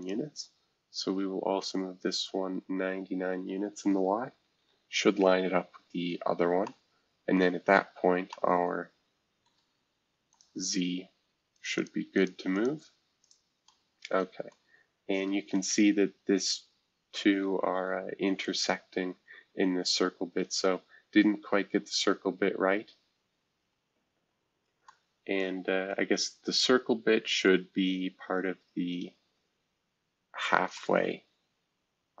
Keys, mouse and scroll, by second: 0.0 click, 1.6 click, 4.4 typing, 5.4 scroll down 1, 5.9-6.3 scroll up 2, 6.0 typing, 7.4 middle click, 8.0 scroll up 1, 9.4 middle click, 10.3 click, 14.5 middle click, 15.4 scroll up 1, 19.6 scroll down 2, 20.7 scroll up 2, 30.7-32.2 middle drag.